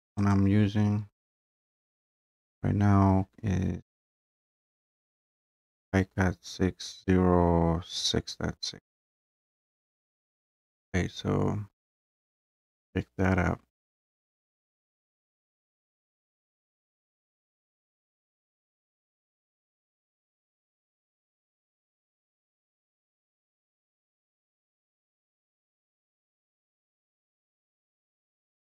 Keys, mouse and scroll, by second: 0.3 click, 1.7 click, 9.3 click, 10.4 scroll, 12.6 click, 14.7 right click, 22.7 click, 23.7 click, 23.9 click, 26.9 click.